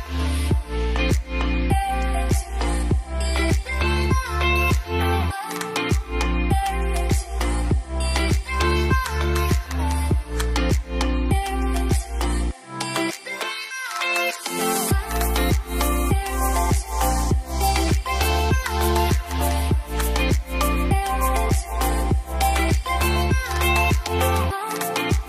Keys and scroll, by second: 18.2-19.2 typing.